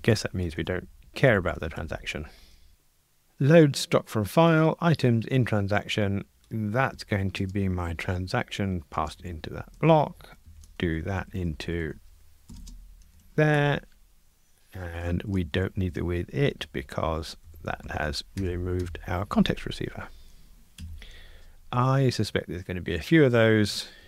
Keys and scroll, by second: 13.6 Escape, 15.7 alt+shift+Right, 17.4 Delete, 21.8 super+F9.